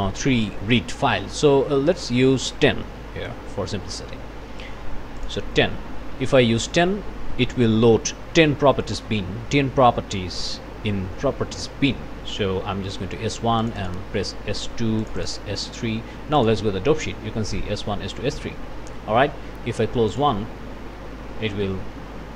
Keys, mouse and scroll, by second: 2.8 KP_1, 3.0 KP_0, 3.2 KP_Enter, 5.2 click, 13.6 click, 15.0 click, 16.4 click, 20.1 click.